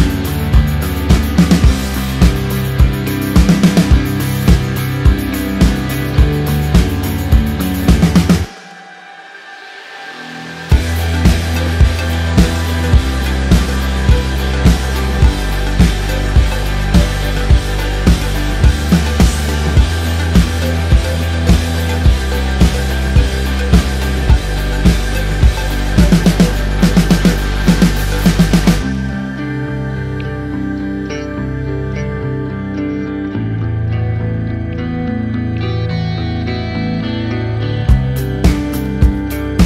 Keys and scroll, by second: 36.4 shift+Page_Up.